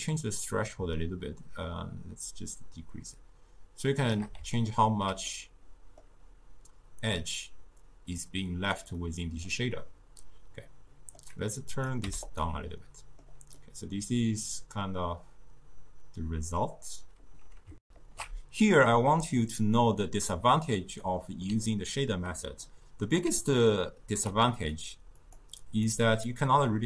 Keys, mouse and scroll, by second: 4.7-11.7 ctrl+middle drag, 11.7 click, 12.9-16.7 middle drag, 17.8 ctrl+alt+shift+w, 21.0-23.3 middle drag, 23.3 d, 23.7-25.2 right drag, 25.2 click.